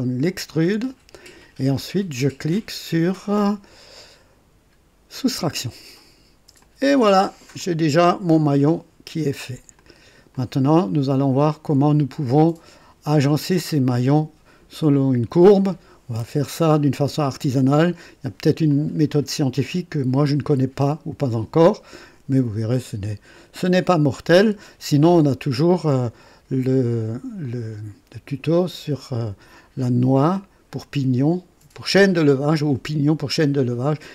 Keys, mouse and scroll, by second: 0.3 ctrl+click, 5.1 click, 6.6 click, 7.6-9.7 drag, 9.8 click, 10.9 click, 11.5 right click, 12.3 click, 18.7-20.5 drag, 26.2 click.